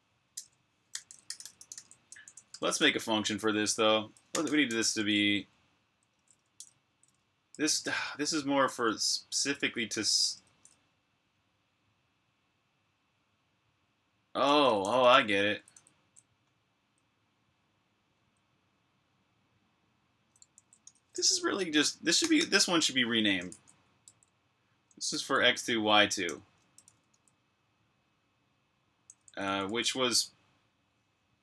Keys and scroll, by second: 0.6-2.6 typing, 4.0-5.8 typing, 7.4-8.9 typing, 12.0-12.8 typing, 14.4-16.8 typing, 20.1-27.5 typing, 29.0-29.5 typing.